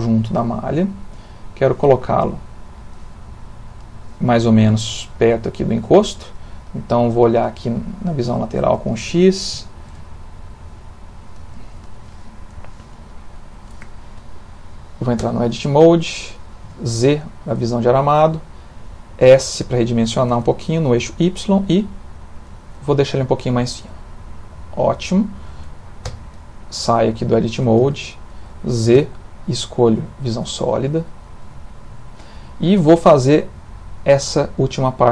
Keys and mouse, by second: 0.0 click, 2.1 middle click, 2.2 middle click, 2.7 middle click, 3.1 middle click, 7.2 click, 8.9 ctrl+middle click, 9.6 shift+middle click, 10.0 ctrl+middle click, 15.2 Tab, 16.6 z, 20.3 s, 26.1 Tab, 26.7 middle click, 27.6 middle click, 27.9 ctrl+middle click, 28.0 ctrl+middle click, 29.0 z, 30.8 ctrl+middle click, 31.2 ctrl+middle click, 32.2 shift+middle click, 32.3 shift+middle click.